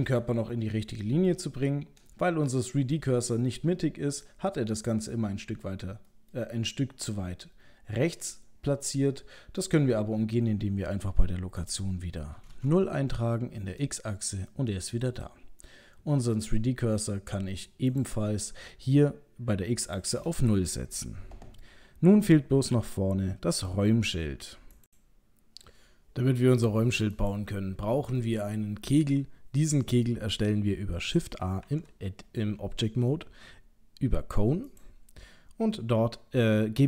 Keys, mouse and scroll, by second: 2.5 middle click, 3.5 middle click, 4.8 middle click, 6.1 middle click, 8.9 middle click, 11.6 click, 14.5 middle click, 17.9 click, 19.9 click, 24.9 click, 27.1 click, 28.2 middle click, 31.6 shift+a.